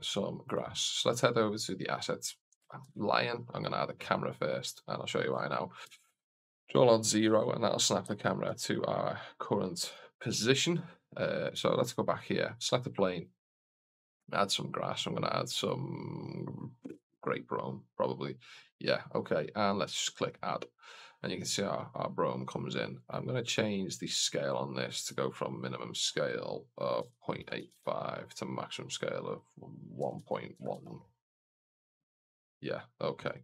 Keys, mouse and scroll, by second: 0.3 click, 2.7 shift+a, 5.7 ctrl+alt+KP_0, 7.1 shift+f, 11.3 right click, 14.0-17.1 drag, 20.1 click, 23.0-24.0 scroll down 1, 24.0 click, 24.0 scroll down 3, 24.8-28.5 drag, 29.1-32.5 drag, 33.1 click.